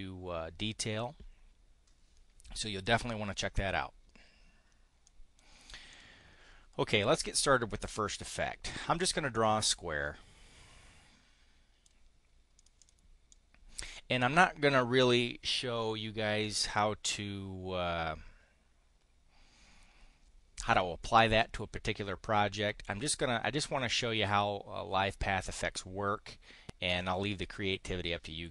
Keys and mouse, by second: 4.9 click, 5.8 click, 8.6 click, 9.2-11.8 drag, 12.5 click, 12.7 click, 13.1 click, 26.7 click.